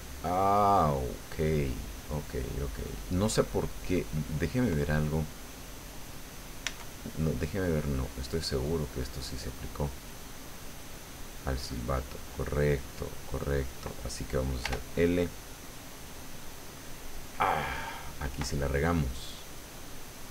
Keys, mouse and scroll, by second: 3.8 click, 5.9 right click, 6.8 Tab, 11.8 right click, 14.6 l, 18.5-20.3 drag.